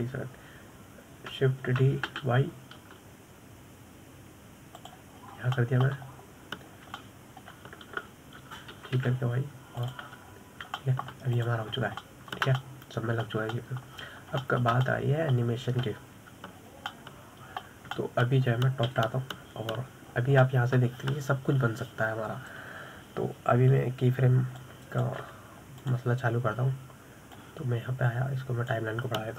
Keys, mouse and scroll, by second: 0.1 b, 3.2 shift+d, 6.6-7.0 scroll down 1, 7.0 shift+middle click, 7.4-8.1 scroll up 3, 8.5-10.2 shift+middle drag, 10.2 g, 11.8-12.2 scroll down 2, 12.2-12.9 shift+middle drag, 12.9 drag, 13.2 scroll up 5, 13.5-15.5 shift+middle drag, 15.5-15.9 scroll up 1, 15.9-18.0 shift+middle drag, 18.0-18.4 scroll down 1, 18.4-20.4 middle drag, 20.4 KP_7, 21.1-21.5 scroll up 2, 21.6 scroll down 3, 21.9 shift+middle drag, 22.1-22.7 shift+scroll up 3, 26.0 click, 27.3 drag, 28.8 click.